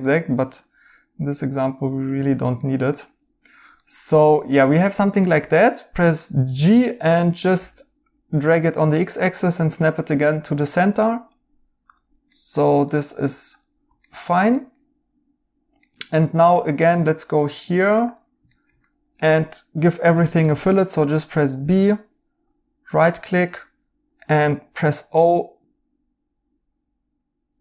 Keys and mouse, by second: 2.4 right click, 6.2 g, 9.9 right click, 12.2 right click, 14.0 right click, 15.8 right click, 18.5 right click, 20.4 b, 22.8 right click, 24.6 o.